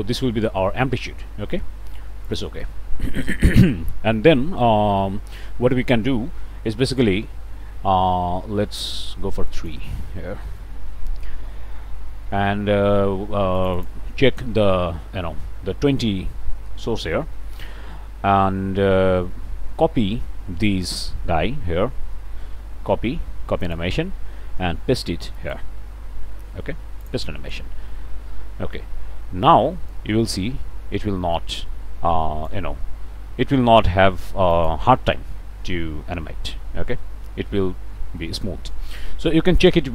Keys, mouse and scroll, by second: 2.3 click, 3.6 click, 4.6 click, 5.5 click, 9.5 click, 10.3 3, 10.6 Return, 13.6 click, 17.1-18.1 drag, 20.7-23.5 drag, 23.6 click, 25.4 click, 27.0 click, 29.9-32.7 drag, 33.1 scroll up 1, 34.5 click.